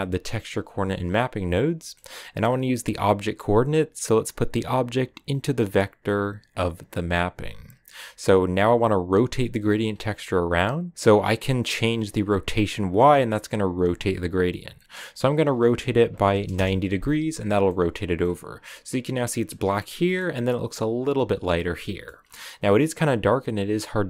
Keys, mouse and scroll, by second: 0.6 click, 4.1-6.7 drag, 7.1-14.1 drag, 16.5-17.6 drag, 17.6 middle click, 18.2-18.6 scroll up 4, 19.4-22.2 middle drag, 22.2 scroll up 1.